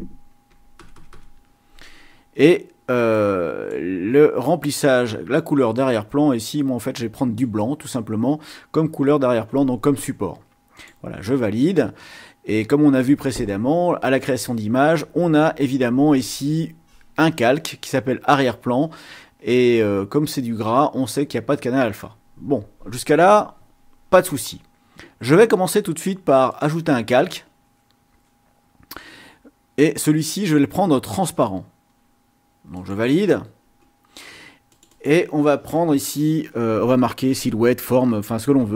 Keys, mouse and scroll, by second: 0.5 KP_1, 0.7 KP_0, 3.1-4.1 drag, 5.8-7.6 drag, 10.8 click, 26.6 click, 32.7 click, 34.7 click, 38.1-38.7 typing.